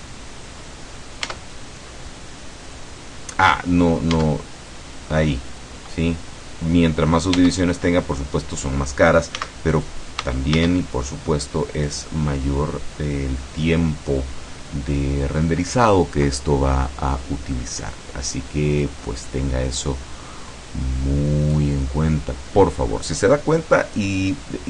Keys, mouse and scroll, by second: 1.3 Tab, 4.2 Tab, 7.4 Tab, 9.4 x, 9.8 click, 10.6 shift+a, 11.8 click, 18.9-21.8 drag.